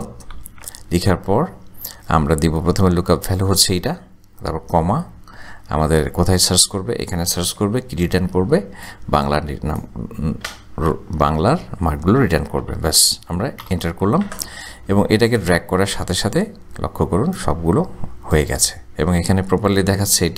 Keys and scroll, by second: 0.0-0.4 typing, 0.5 Tab, 5.0 ,, 8.1 ,, 12.6 shift+0, 13.6 Return.